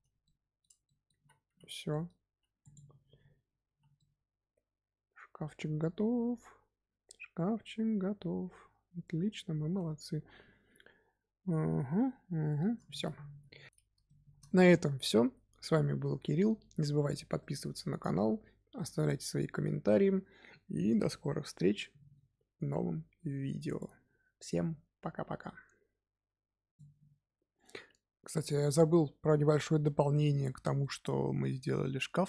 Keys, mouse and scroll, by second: 0.2-1.1 shift+middle drag, 1.1-3.6 typing, 1.8-2.3 middle drag, 2.5 click, 3.9-7.0 middle drag, 12.8-13.7 shift+middle drag, 14.0-15.1 shift+middle drag, 15.1-17.3 scroll up 2, 17.3-20.3 middle drag, 30.8-32.2 middle drag.